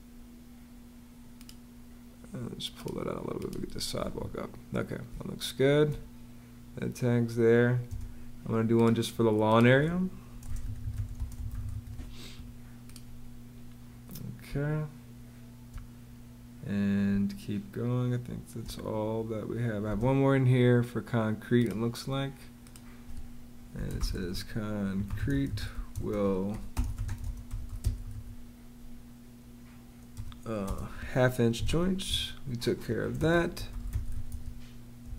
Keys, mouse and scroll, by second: 3.8 Escape, 4.9 space, 7.7 space, 10.1-12.0 typing, 14.3 space, 16.9 space, 19.7 space, 23.5-28.4 typing, 30.0-35.1 typing.